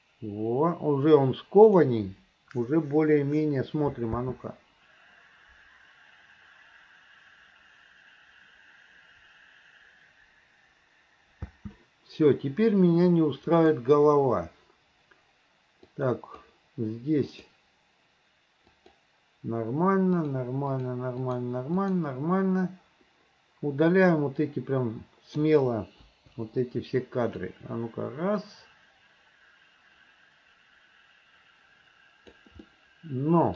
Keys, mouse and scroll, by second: 4.2 space, 11.4 space, 13.6 click, 15.9 click, 17.4 click, 18.8 click, 20.2 click, 20.7 click, 21.2 click, 21.8 click, 24.1-25.4 drag, 26.1 Delete, 27.5-32.4 drag, 32.7 middle click.